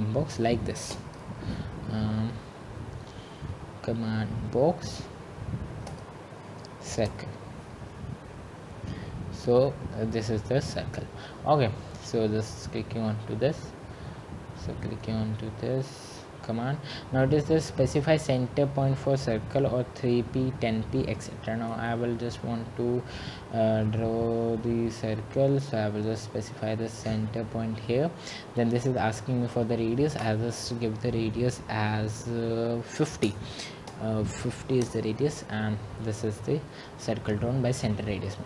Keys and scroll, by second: 7.3 c, 33.6-35.7 typing.